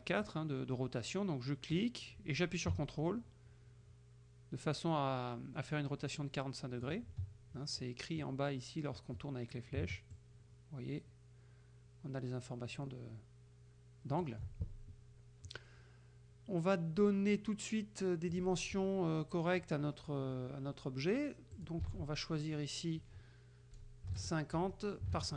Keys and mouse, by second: 1.8-7.1 drag, 10.2-14.5 ctrl+drag, 18.4 click, 21.6 ctrl+click, 22.0 ctrl+a, 24.2 KP_5, 24.6 Tab, 25.1 KP_5.